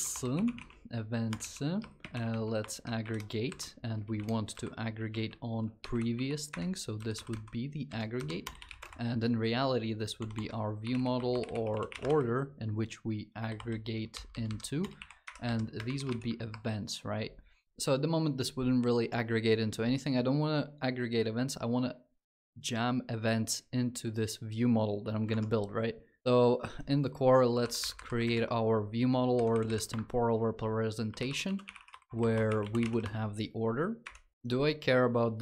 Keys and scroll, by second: 27.4 Up, 28.8 alt+Insert.